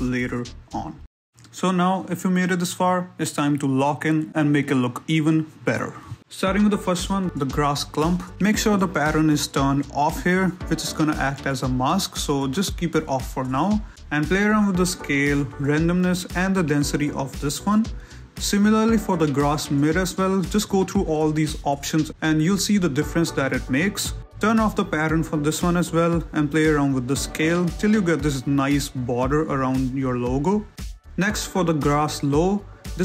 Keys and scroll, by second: 9.0 z, 11.4 ctrl+z, 12.6 ctrl+shift+z, 14.4 z, 28.9 shift+z, 31.5 ctrl+z.